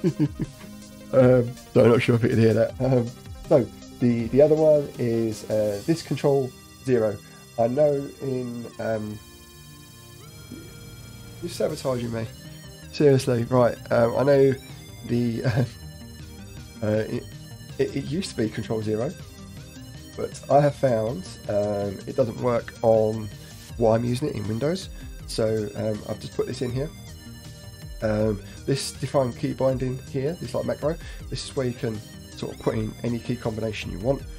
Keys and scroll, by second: 18.0 Up, 18.1 Up, 18.4 Down, 19.6 Left, 20.0 shift+Down, 20.8 shift+Right.